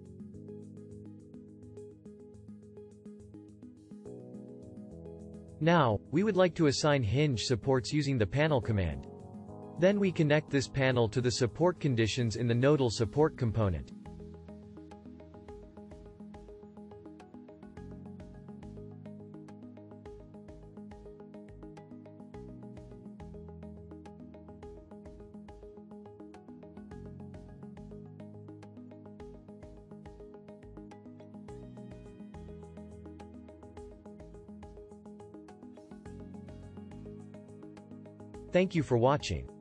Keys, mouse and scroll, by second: 9.6 shift+7, 25.9-30.7 shift+drag.